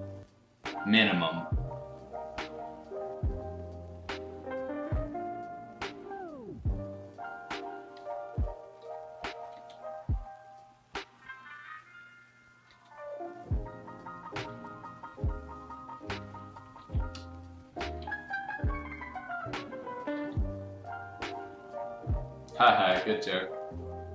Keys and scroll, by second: 7.9 x, 8.8 x, 9.5 ctrl+z, 12.6 ctrl+z, 14.5 ctrl+z, 14.7 ctrl+z, 16.8 ctrl+z, 17.1 space, 20.1 ctrl+z.